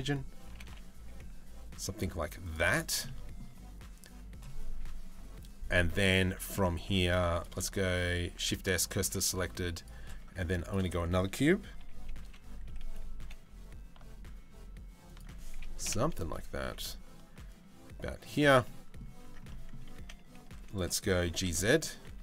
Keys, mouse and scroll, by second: 0.1 g, 2.7 middle click, 7.9 shift+s, 8.8 shift+a, 11.4 KP_3, 11.8 KP_1, 12.8 g, 15.4 KP_7, 16.2 g, 18.2 middle click, 18.8 Tab, 19.1 middle click, 19.6 z, 20.8 g.